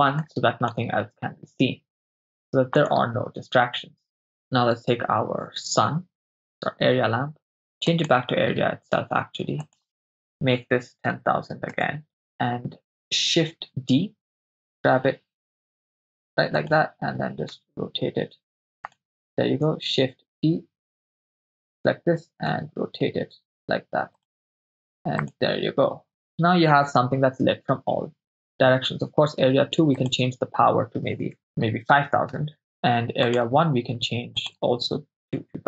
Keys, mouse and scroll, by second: 0.2 click, 2.9 click, 6.1 click, 8.0 click, 9.6-11.8 drag, 10.9 0, 11.1 0, 13.7 shift+d, 14.4 click, 14.4 g, 16.6 click, 17.5 r, 18.9 click, 20.1 shift+d, 21.6 click, 22.6 r, 24.2 click, 25.4 click, 30.0-32.6 drag, 32.6 0, 33.3-33.6 drag, 34.4-35.6 drag.